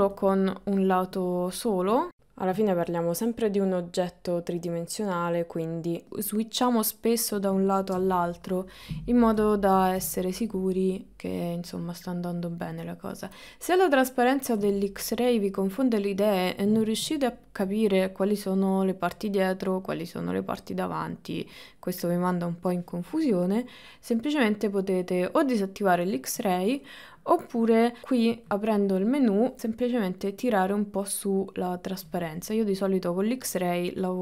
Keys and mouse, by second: 0.2 click, 2.1 click, 3.6-4.9 drag, 5.0-7.2 middle drag, 8.0 KP_1, 9.7 middle click, 10.2 middle click, 14.8 middle click, 17.8-22.8 middle drag, 25.2-32.1 drag, 32.3-34.2 middle drag.